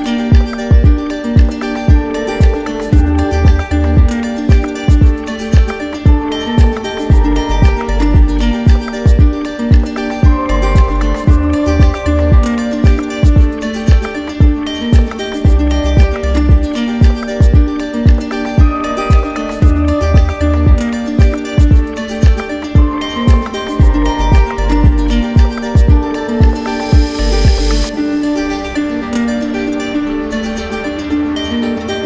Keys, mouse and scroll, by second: 1.0 click, 1.4 click, 1.6 click, 2.3 click, 3.5 click, 3.6 click, 4.7 click, 5.5 click, 6.3 click, 7.3 click, 11.2 click, 11.6 d, 12.8 right click, 14.3 right click, 15.0 alt+click, 15.6 ctrl+z, 16.9 alt+click, 17.6 ctrl+z, 21.5 click, 25.1-25.6 scroll, 26.7 alt+click, 27.4 ctrl+z, 28.2 alt+click, 28.6 alt+click, 29.3 alt+click, 29.8 alt+click, 30.4 alt+click.